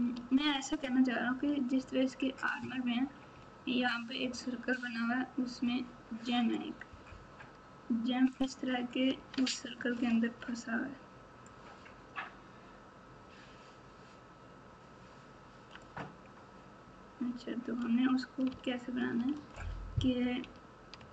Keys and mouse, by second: 0.1 alt+z, 9.3 alt+z, 10.0 alt+z, 11.4 click, 11.6-15.8 drag, 18.4 alt+z, 19.3 alt+z, 20.1 KP_4, 20.4 KP_4.